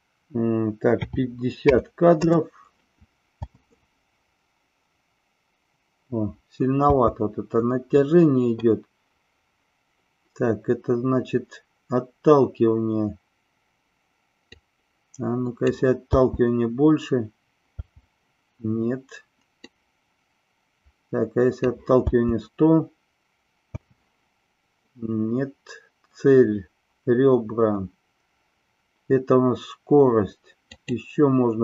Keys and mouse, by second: 3.4 space, 6.9 space, 14.6-15.7 drag, 16.0 space, 19.6-21.6 drag, 22.0 space, 30.7 click.